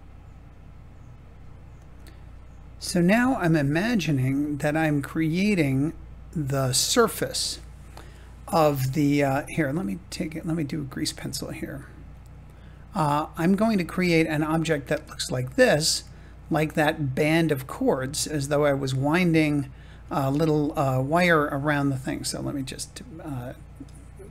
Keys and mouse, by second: 1.7 click, 2.7 click, 3.0 g, 4.1-5.1 drag, 5.3 g, 7.0-8.1 drag.